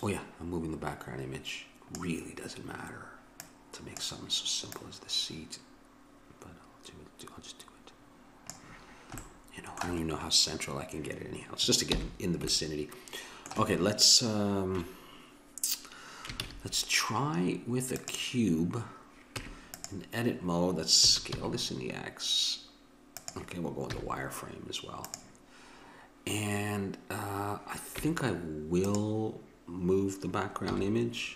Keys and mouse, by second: 0.0-1.8 drag, 3.3-8.0 drag, 9.2 middle click, 11.9 n, 16.4 shift+a, 19.3 Tab, 21.1 s, 23.9 z, 28.0 Tab, 30.6 n.